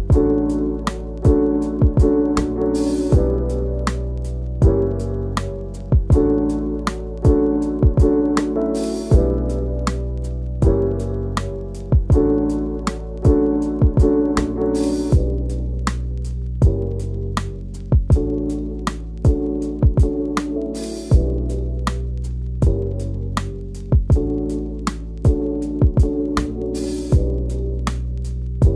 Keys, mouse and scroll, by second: 0.0 e, 0.2 click, 0.4-1.5 click, 2.7 click, 3.1 scroll down 1, 4.7-5.1 scroll up 2, 5.1 scroll down 1, 5.3 shift+middle click, 5.4-5.8 scroll up 4, 5.8 click, 6.2-8.3 e, 8.5 Left, 8.7 Left, 9.7 Left, 10.1-10.4 scroll down 1, 10.4 scroll up 1, 10.7 scroll down 1, 10.8 scroll up 1, 11.3 Left, 11.4 Left, 11.6 scroll down 1, 11.9 middle click, 12.3 scroll up 1, 12.5 scroll down 1, 12.6 a, 13.1 2, 13.2 alt+click, 14.2 right click, 14.3 Tab, 14.4 click, 14.7 click, 15.1 Tab, 15.4 1, 15.5 a, 15.7 middle click, 15.9-16.3 scroll up 1, 16.3 click, 16.5 shift+middle click, 17.4 KP_Decimal, 17.9 scroll up 2, 18.3 click, 18.6 scroll down 1, 19.5 KP_Decimal, 20.2 shift+middle click, 20.3 scroll up 2, 20.5 middle click, 21.1 click, 21.9-23.0 scroll down 1, 23.0 scroll up 2, 23.1-26.8 typing, 23.3 click, 23.9 click, 24.2 shift+click, 24.6 scroll down 2, 24.9 shift+middle click, 25.7 alt+click, 26.2 click, 26.9 click, 27.0 middle click, 28.0 click.